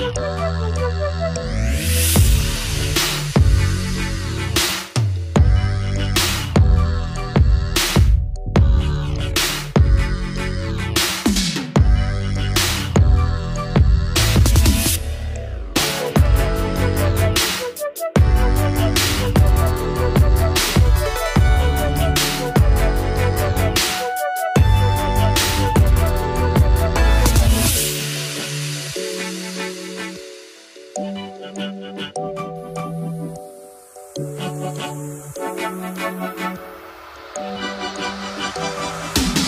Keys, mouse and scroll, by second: 1.1 r, 5.3-6.3 scroll up 4, 6.3-8.3 drag, 9.6-11.0 drag, 11.6 click, 12.7 click, 14.6-16.0 drag, 16.7 scroll down 2, 17.8-18.1 drag, 18.1-18.8 scroll down 1, 18.8 click, 19.8 click, 20.7-22.8 drag, 24.6-27.0 scroll down 4, 27.6-28.4 scroll up 3, 28.4 click, 28.7-30.0 drag, 31.3-37.0 drag, 38.7-39.4 drag.